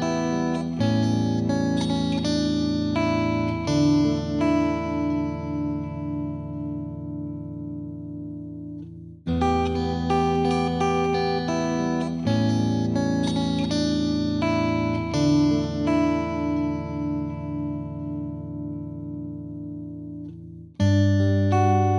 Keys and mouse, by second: 0.2 click, 1.5 click, 2.2 click, 3.9 click, 7.0 click, 8.5 click, 9.5-10.6 drag, 9.8 ctrl+z, 11.0-12.2 drag, 12.5-13.6 drag, 20.2-21.2 drag.